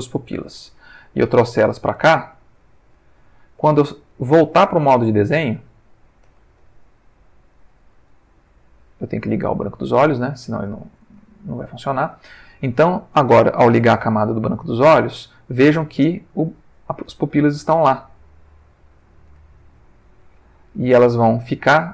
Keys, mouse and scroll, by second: 1.3 g, 2.7 click, 5.5 Tab, 8.1 ctrl+middle click, 9.3 click, 10.4 ctrl+middle click, 11.4 ctrl+middle click, 12.4-16.8 middle drag, 15.7 Tab, 17.4 g, 18.8 click, 19.3 Tab.